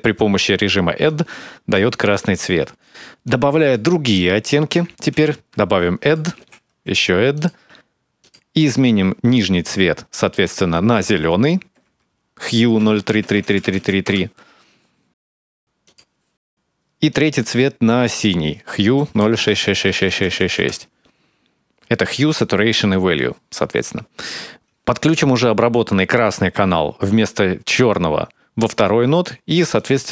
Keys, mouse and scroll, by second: 0.8 click, 2.1 click, 2.5 x, 3.0 click, 3.9 click, 4.9 shift+d, 6.3 shift+d, 8.0 click, 12.6-13.4 typing, 15.6 click, 19.1-20.1 typing, 24.6 ctrl+right click, 26.8 click, 29.5 click.